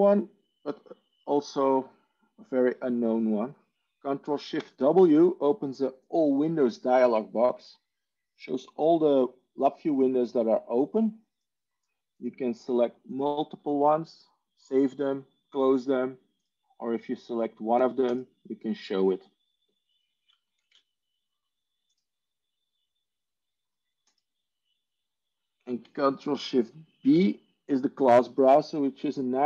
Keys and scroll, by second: 4.5 ctrl+shift+w, 20.5 ctrl+shift+w, 26.7 ctrl+shift+b.